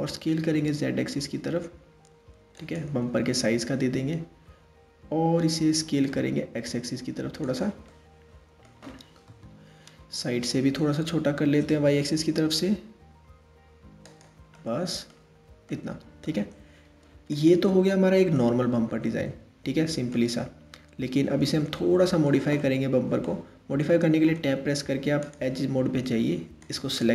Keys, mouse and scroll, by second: 3.2-4.2 scroll up 4, 4.2-5.4 scroll up 1, 5.4 s, 7.5-8.9 middle drag, 8.9 KP_3, 9.7 scroll down 2, 10.8 s, 14.1 middle click, 14.9-15.3 scroll down 1, 15.3-16.9 middle drag, 16.9 click, 18.0-20.3 middle drag, 20.3-21.3 scroll up 1, 21.3-23.3 shift+middle drag, 23.3 Tab, 24.8 click, 26.2 click.